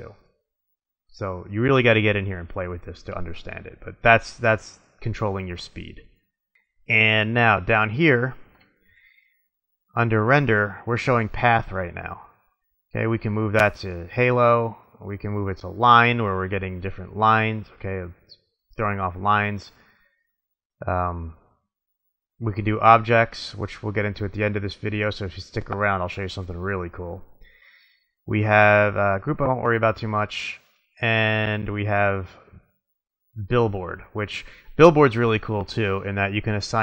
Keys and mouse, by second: 1.0-2.7 middle drag, 4.1 click, 6.6 middle click, 9.3-11.4 middle drag, 13.7-15.2 drag, 17.0 middle drag, 22.7 click, 29.2-30.9 drag, 30.9 middle click, 31.2-32.9 middle drag, 32.9 click, 35.6-36.8 middle drag.